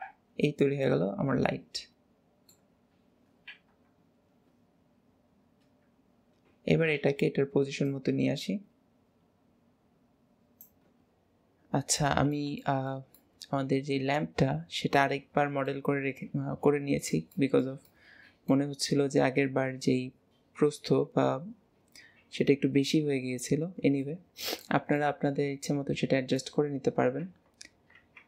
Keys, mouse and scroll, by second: 0.3-0.9 scroll down 4, 0.9-3.8 middle drag, 3.8 KP_1, 7.9 click, 12.0-21.0 middle drag, 15.8-17.3 scroll up 3, 24.0-25.2 middle drag, 26.8-28.2 middle drag.